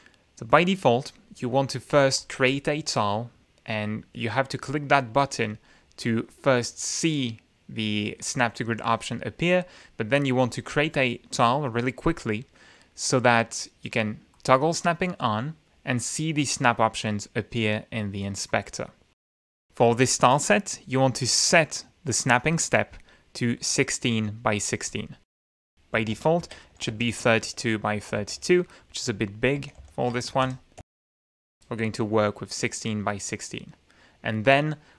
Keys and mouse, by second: 2.3 click, 10.6-11.2 drag, 14.5 click, 20.4 click, 25.1 click, 25.7 click, 26.3-28.0 typing, 28.0 Return, 28.8 shift+Tab, 29.9-31.5 typing.